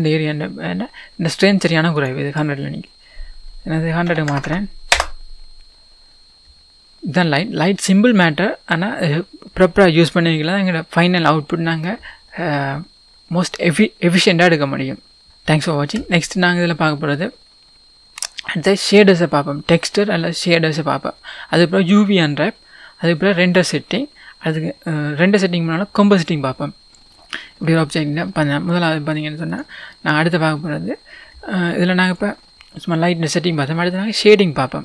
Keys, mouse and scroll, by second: 2.2-6.8 drag, 4.9 KP_0, 5.0 Return, 10.7 scroll up 1, 26.9-29.6 middle drag, 27.5-28.0 scroll up 2, 28.0-28.7 scroll down 2, 28.7-29.6 scroll down 1, 29.6 click, 32.1 click.